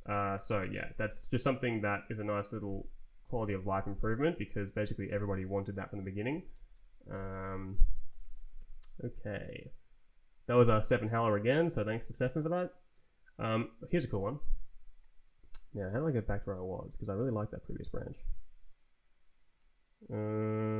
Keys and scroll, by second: 0.3 shift+-, 0.9 Left, 1.5 Down, 3.2 shift+d, 3.9 Return, 6.2 d, 6.7 Return, 7.0 d, 7.2 Return, 14.1 ctrl+t, 14.7 Right, 15.4 Up, 15.7 Down, 16.3 Down, 16.9 Down, 17.3 Up, 17.9 space.